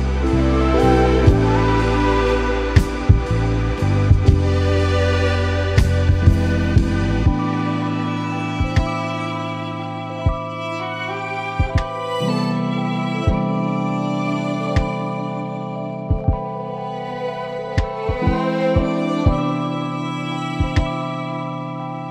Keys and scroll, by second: 8.1 super+-, 8.2 super+0, 8.5 super+s, 10.0 super+s, 12.8-13.6 typing, 18.4 [, 18.5 ].